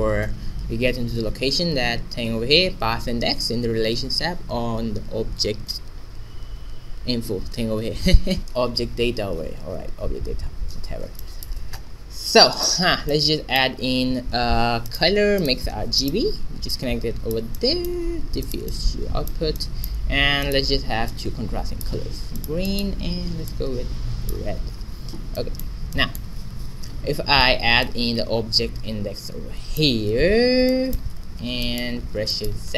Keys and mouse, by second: 0.0-1.1 right drag, 8.4-10.1 middle drag, 11.2-12.9 middle drag, 12.5 click, 12.7 right click, 12.9-14.8 drag, 13.7 shift+a, 17.5-20.2 drag, 20.2 middle click, 20.4-22.0 drag, 25.3-27.7 middle drag, 27.8-29.4 drag, 30.6 middle click, 31.2 a.